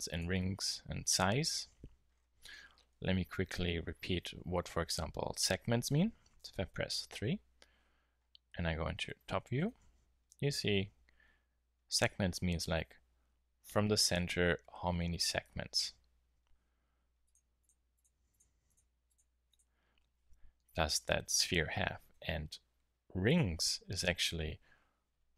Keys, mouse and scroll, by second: 2.0-3.2 middle drag, 5.3-6.6 drag, 8.7-11.2 middle drag, 17.2-19.2 drag.